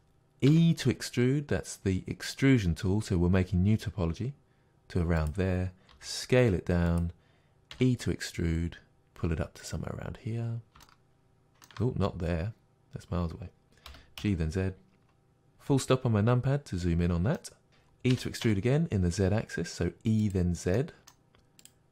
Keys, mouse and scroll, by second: 0.0 click, 0.5 e, 5.3 click, 5.9 s, 7.0 click, 7.7 e, 9.7 click, 10.9-15.5 shift+middle drag, 12.1-13.9 scroll down 2, 13.9 g, 15.5 KP_Decimal, 16.4-16.8 scroll down 2, 17.3 scroll down 1, 17.4-20.3 middle drag, 18.1 e, 20.3 click, 20.8 middle click, 21.6 click.